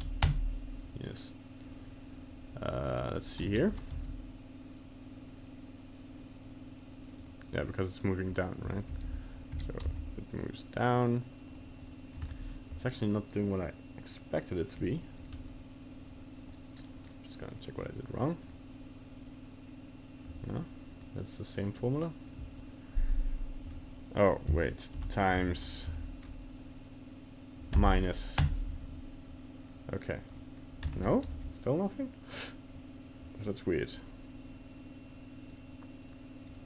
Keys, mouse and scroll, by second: 2.9 right click, 3.5 ctrl+Tab, 3.6 right click, 3.9 g, 9.0 alt+g, 9.5 g, 11.8 right click, 12.2 ctrl+Tab, 12.4 right click, 15.2 right click, 17.0 click, 17.5 right click, 21.0 click, 21.5 right click, 30.3 right click, 30.9 ctrl+Tab, 31.1 right click, 31.3 g, 36.5 right click.